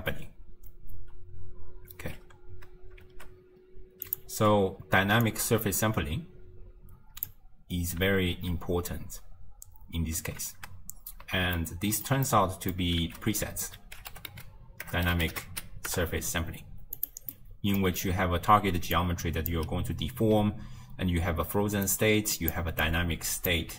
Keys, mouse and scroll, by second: 2.2 space, 3.1 shift+space, 4.1 click, 4.4 m, 5.3 drag, 8.4 shift+space, 10.1 space, 10.6 shift+space, 11.6-13.1 ctrl+middle drag, 13.1 ctrl+a, 17.4 middle click, 17.9-18.5 scroll up 2, 18.5 d, 19.0-19.6 drag, 19.6-23.7 typing, 21.9 click, 22.9 click.